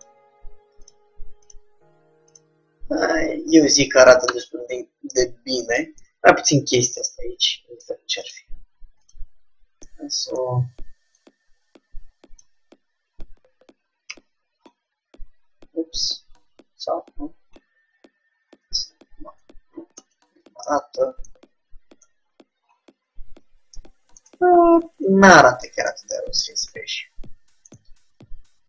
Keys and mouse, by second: 0.2 g, 1.7 g, 3.5 middle click, 4.1 middle click, 4.5 Tab, 5.8 middle click, 7.7 middle click, 8.0 Tab, 8.4 click, 10.0 click, 11.1 middle click, 11.3-13.0 drag, 13.1 middle click, 14.3 s, 17.2-18.2 middle drag, 18.6 z, 19.5 middle click, 19.5 z, 20.2 Tab, 22.2 KP_3, 25.6 middle click, 28.1-28.6 middle drag.